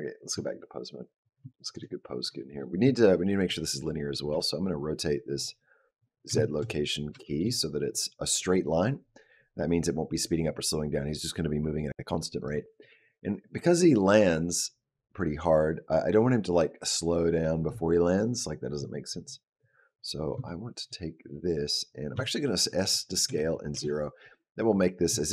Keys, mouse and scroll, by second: 0.7-1.2 scroll up 1, 1.3 shift+middle click, 1.7-2.1 scroll up 2, 3.2 click, 4.1 r, 6.2 shift+middle click, 6.5-6.9 scroll up 3, 7.0 shift+middle click, 12.2 click, 13.9 click, 20.3 shift+middle click, 22.0 s.